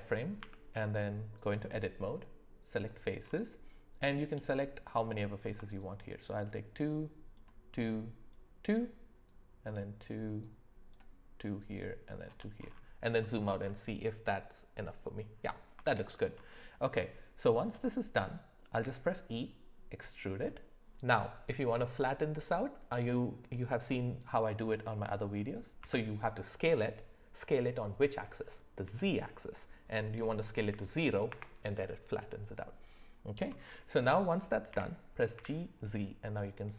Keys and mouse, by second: 0.4 Tab, 2.8 click, 4.2 click, 5.7 shift+click, 6.9 shift+click, 7.8 shift+click, 9.3 shift+click, 10.5 shift+click, 11.6 shift+click, 13.2 shift+middle click, 15.8 shift+middle click, 18.8 e, 25.8 s, 34.7 g.